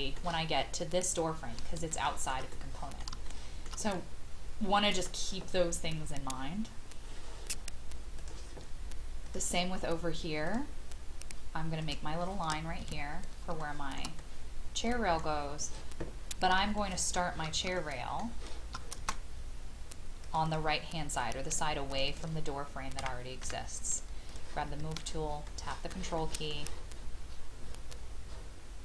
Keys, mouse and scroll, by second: 1.9 shift+middle click, 2.5 middle click, 3.2 shift+middle click, 3.9 middle click, 4.0-4.8 scroll up 1, 5.9 scroll up 1, 8.2 click, 12.8 Escape, 13.6 shift+middle click, 14.2-16.0 middle drag, 16.2 scroll down 1, 16.8 shift+middle click, 17.7 shift+middle click, 20.2 click, 21.1 scroll up 1, 21.9-23.1 drag, 23.4 m, 24.3 click, 25.4 shift+middle click, 26.1 shift+middle click, 26.5 shift+scroll down 1, 27.4-28.8 scroll up 1.